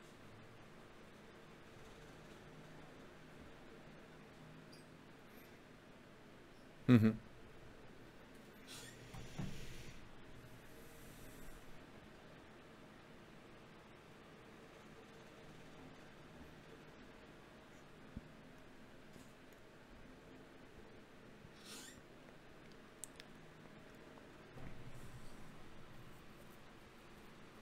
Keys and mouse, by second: 4.1-5.7 drag, 5.3 ctrl+Tab, 6.7-7.9 drag, 8.1-10.3 drag, 10.3 f, 10.9 f, 14.7-16.5 right drag, 16.3 ctrl+Tab, 17.4 right click, 18.0 click, 19.0-20.2 drag, 19.7 ctrl+Tab, 22.8 f, 23.4 f.